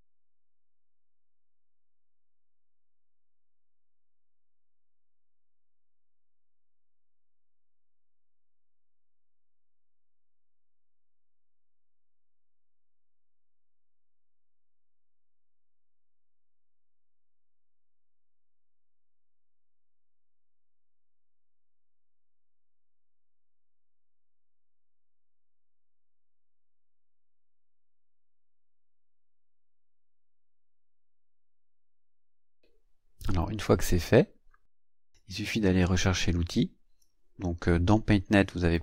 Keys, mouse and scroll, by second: 0.0 click, 1.2-6.0 drag, 6.5-8.0 drag, 9.6 click, 10.7-11.8 ctrl+scroll down 6, 13.1 click, 14.4-19.1 drag, 20.1-23.6 drag, 24.0-26.6 drag, 27.0-29.3 drag, 29.6-30.9 drag, 31.1 click, 32.8 ctrl+scroll down 2, 34.1 ctrl+scroll down 2, 35.1 click, 37.0-38.8 drag.